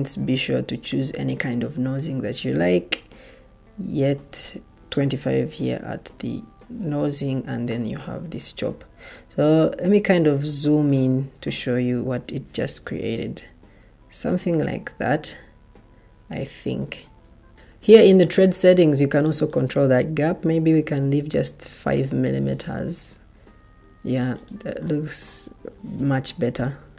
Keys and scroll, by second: 12.7 o, 20.1 5, 26.3 o.